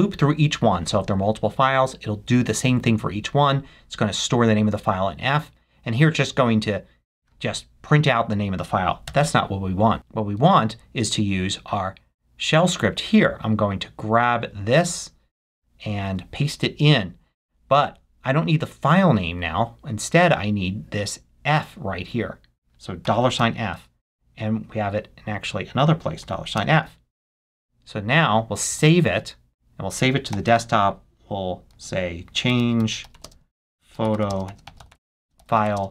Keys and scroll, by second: 9.0 BackSpace, 15.1 super+c, 16.6 super+v, 22.6 shift+4, 23.8 f, 28.1 shift+4, 29.3 f, 31.8-34.8 typing.